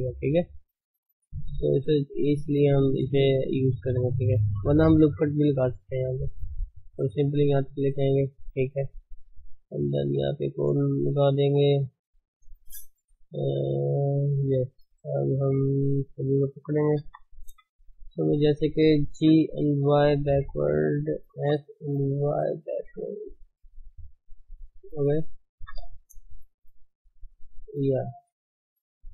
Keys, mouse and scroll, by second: 7.8 scroll down 4, 8.5 scroll up 2, 9.8 ctrl+r, 12.2 scroll down 3, 12.4-14.9 middle drag, 14.9 alt+shift+click, 15.6 alt+shift+click, 16.2 alt+shift+click, 17.1 KP_3, 17.8 shift+z, 18.1-19.3 shift+middle drag, 19.3 g, 21.4 s, 25.7 g, 27.7 shift+z, 28.0-29.1 middle drag.